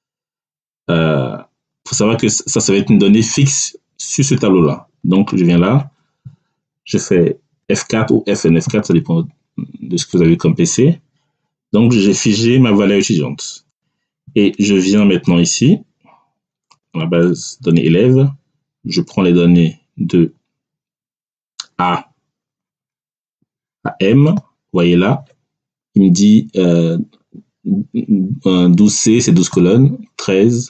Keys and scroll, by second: 8.0 F4.